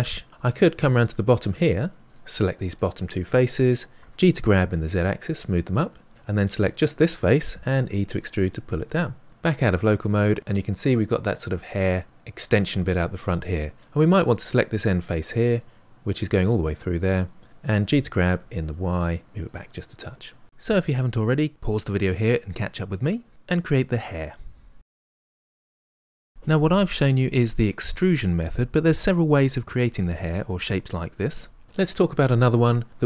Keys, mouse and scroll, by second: 0.3-2.0 middle drag, 2.0 click, 2.7 shift+click, 3.9 g, 6.6 click, 7.7 e, 9.3 KP_Divide, 10.1-12.0 middle drag, 14.1 click, 15.6-17.8 middle drag, 17.8 g, 19.8-31.6 middle drag.